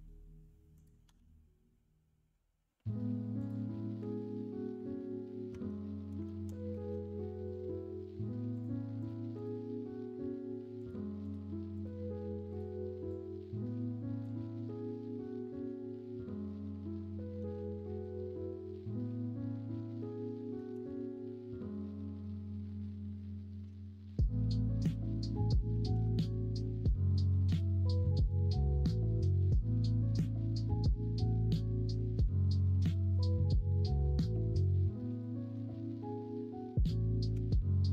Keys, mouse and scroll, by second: 1.0 g, 5.4 Tab, 6.3 alt+z, 6.7 alt+z, 18.9-20.5 shift+middle drag, 23.6 Tab, 24.9 Tab, 34.4 3, 37.4 s.